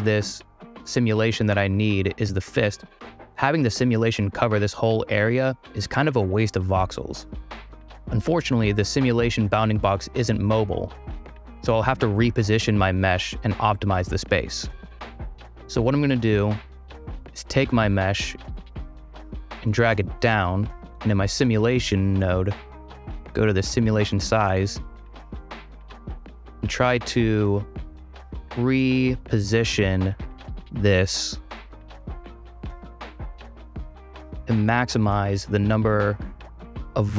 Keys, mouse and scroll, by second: 3.2-6.8 drag, 18.1-19.3 drag, 19.5 click, 20.4 click, 21.7 click, 22.9-23.7 drag, 24.1 click, 24.5 middle click, 24.8-25.7 drag, 28.0 click, 29.1 click, 31.1 click, 32.0 click, 32.6 click, 33.7 click, 34.6 click, 35.0-37.1 drag.